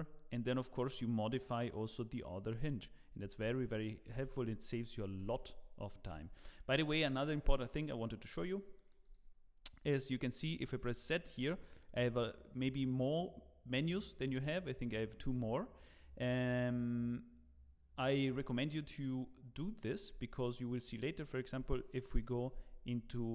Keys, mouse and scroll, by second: 3.2 ctrl+z, 4.1 Tab, 5.2 ctrl+s, 6.1 z, 7.0 shift+middle click, 8.3 middle click, 8.7 middle click, 8.8 shift+middle click, 9.0 click, 11.8 z, 20.4 middle click, 20.8-21.1 scroll down 5, 21.2 shift+middle click, 22.1 KP_0, 22.7-23.3 scroll down 8.